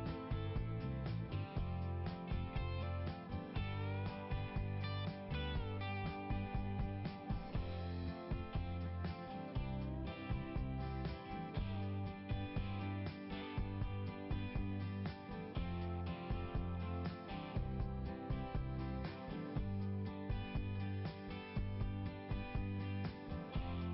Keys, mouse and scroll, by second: 1.8 click, 4.5-4.8 scroll up 1, 6.5-7.0 scroll down 1, 8.4 click, 10.1 scroll up 1, 11.7-12.9 scroll down 1, 12.9 click, 16.3 click, 21.5 click.